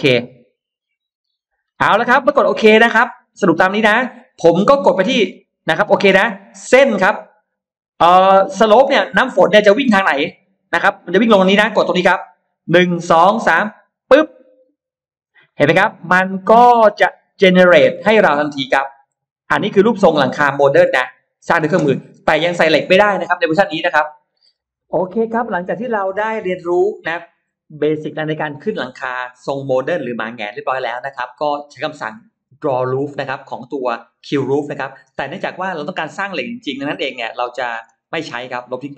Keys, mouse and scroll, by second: 0.6 click, 5.7 click, 13.9 click, 15.3 middle click, 16.7-17.1 scroll up 1, 17.2-19.5 middle drag, 19.5-20.7 scroll down 2, 20.1 middle click, 20.9 scroll up 2, 21.1 middle click, 21.5 scroll down 2, 21.9-22.2 scroll up 2, 24.3-24.7 scroll down 2, 24.7 middle click, 36.3-37.3 middle drag, 36.5-36.8 scroll down 2, 37.9 space, 38.0-38.9 drag.